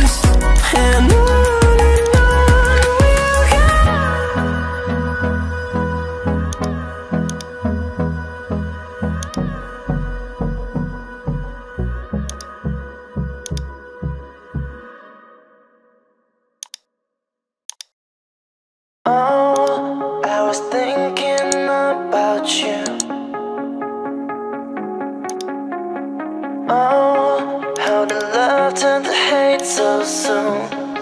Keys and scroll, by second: 2.4 Return, 2.8 Delete, 3.9 ctrl+d, 26.2 ctrl+alt+shift+e.